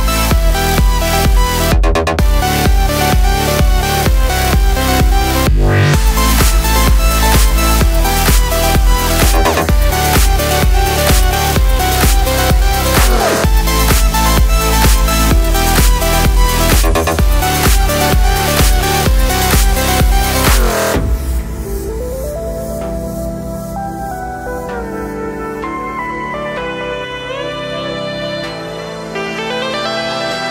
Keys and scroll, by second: 14.9 space, 17.7 Home, 17.7 space, 20.8 Home, 26.4 space.